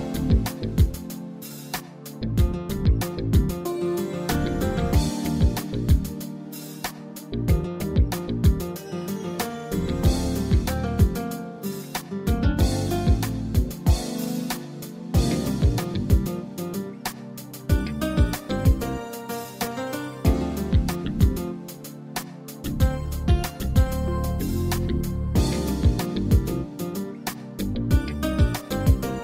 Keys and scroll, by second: 24.8 ctrl+z.